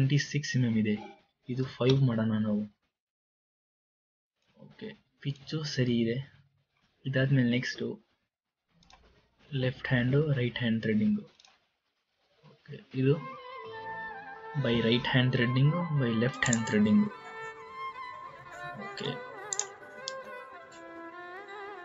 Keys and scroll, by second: 1.8 KP_5, 2.1 Return.